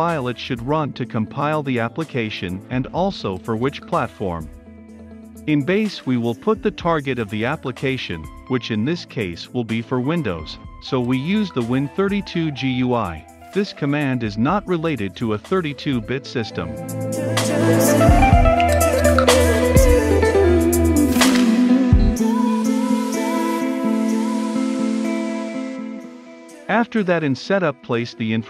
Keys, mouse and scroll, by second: 0.2 Return, 0.7 click, 1.2-2.6 typing, 1.6 Return, 1.8 Return, 4.9-6.6 drag, 6.6 Left, 8.3 Return, 9.1 b, 9.2 a, 9.4 s, 9.6 e, 10.1 Return, 11.0 shift+`, 13.3 shift+w, 13.8 n, 16.3 shift+g, 16.6 shift+u, 16.8 shift+i, 17.5 Right, 18.6-20.6 typing, 19.2 Return, 19.7 Return, 20.6 Return, 20.8 ctrl+z, 20.9-24.0 drag, 24.0 Return, 24.3-26.5 typing, 25.8 Return, 25.8 Caps_Lock, 28.0 Down.